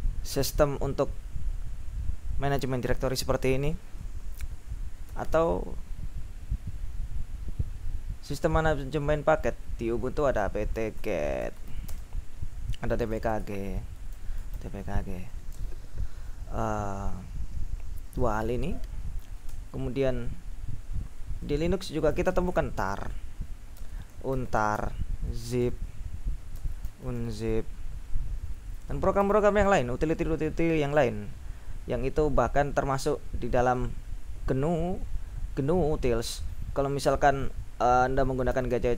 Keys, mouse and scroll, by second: 5.2 ctrl+u, 10.1-15.8 typing, 19.5 BackSpace, 22.0-27.9 typing, 29.2 ctrl+u, 38.4-38.9 typing.